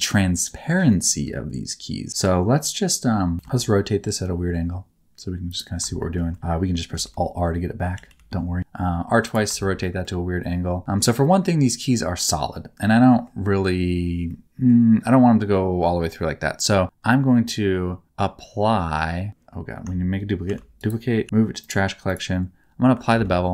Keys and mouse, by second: 0.8 middle click, 3.3 r, 5.9 shift+middle click, 6.9 alt+r, 7.9 r, 8.8 r, 9.7 shift+middle click, 10.1 middle click, 12.5 middle click, 14.3 middle click, 20.4 shift+d, 21.2 m, 23.1 ctrl+a.